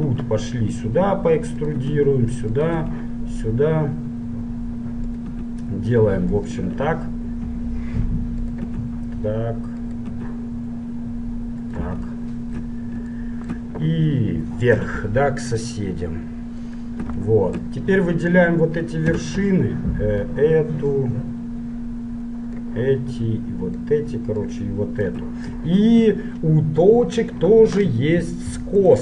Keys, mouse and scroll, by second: 0.2 e, 2.0 e, 2.9 e, 5.5 e, 6.8 e, 8.9 e, 10.2 e, 12.4-15.3 middle drag, 14.8 e, 17.4-19.7 middle drag, 19.4 a, 19.7-23.1 drag, 23.4-26.5 drag, 26.5-29.0 middle drag.